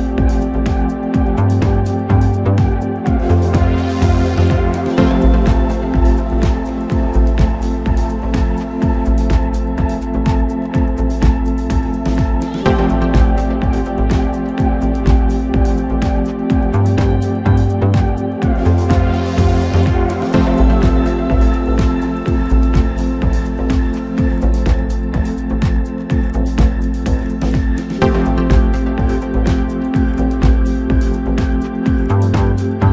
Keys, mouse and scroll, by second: 2.3-4.8 scroll down 1, 4.8-5.9 drag, 7.2 1, 7.7 click, 9.0 shift+click, 10.2 s, 12.4 Tab, 13.5 click, 14.0-15.5 middle drag, 15.5 Tab, 16.2 KP_7, 17.5-18.7 drag, 20.5 click, 21.5 KP_1, 22.3 scroll up 1, 22.6 s, 27.2 Tab, 27.7-28.5 scroll down 1, 28.5-29.4 scroll up 1, 29.4 g.